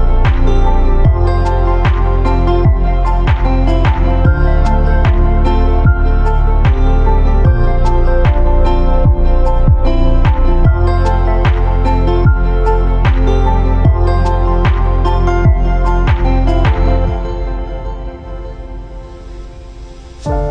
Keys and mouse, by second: 1.4 shift+click, 1.8 click, 3.6 click, 3.8 g, 4.6 click, 4.8 g, 5.6 click, 5.8 g, 6.9 click, 7.2 g, 8.5 shift+middle click, 9.8 middle click, 10.7 shift+middle click, 11.0 click, 11.1-14.8 typing, 11.9 click, 12.8 click, 13.8 click, 14.7 click, 15.7 click, 15.9 g, 16.7 shift+middle click, 17.1 click, 17.3 g, 18.5 click, 18.7-20.5 typing.